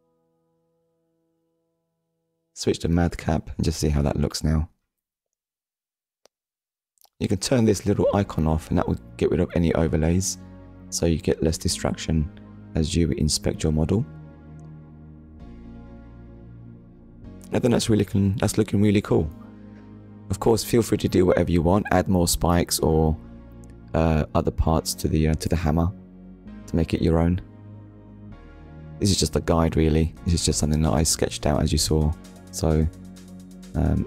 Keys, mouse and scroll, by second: 0.7 click, 1.3 click, 1.9 click, 2.2 middle click, 8.5 click, 9.0 click, 9.6 middle click, 18.9 scroll down 1, 19.5 shift+middle click, 19.9 middle click, 24.0 click, 26.2 click, 27.1 click, 27.8 click, 29.1 ctrl+s, 32.2 click, 33.7 middle click.